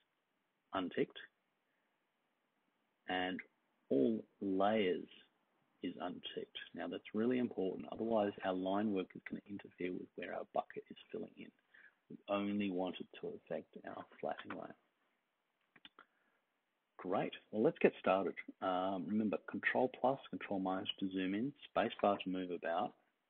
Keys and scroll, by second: 22.0 l.